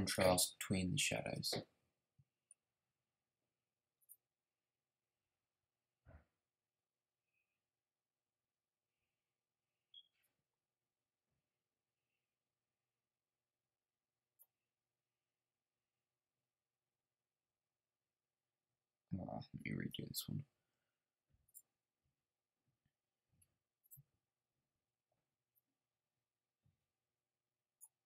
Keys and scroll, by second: 19.7 super+z.